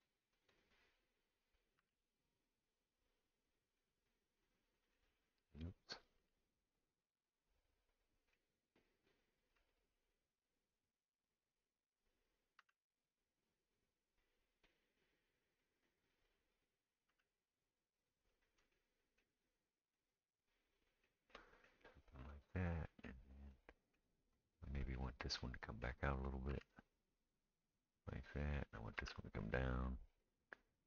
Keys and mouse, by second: 0.0-3.6 drag, 0.0 middle click, 1.8 g, 3.2 middle click, 3.2-30.8 right drag, 5.7 click, 6.2 g, 9.0 click, 9.0 middle click, 9.6 g, 12.2 click, 12.7 g, 15.6 click, 15.6 middle click, 17.1 g, 19.7-22.6 middle drag, 22.2 click, 24.4 click, 24.9 click, 26.5 g, 29.0 g.